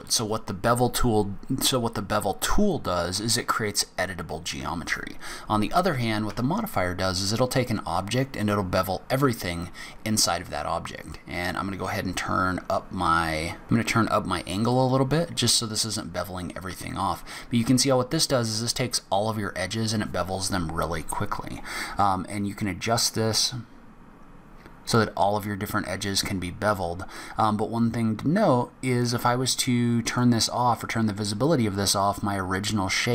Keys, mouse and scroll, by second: 2.2 scroll down 1, 5.1 scroll down 1, 5.6 scroll up 1, 6.5 Tab, 6.9 click, 7.8 click, 9.3 scroll down 1, 9.5 scroll up 1, 11.2 click, 12.4 click, 15.5 scroll up 1, 16.1 scroll down 1, 18.8 scroll up 1, 19.4 scroll down 1, 21.3 click, 30.3 click.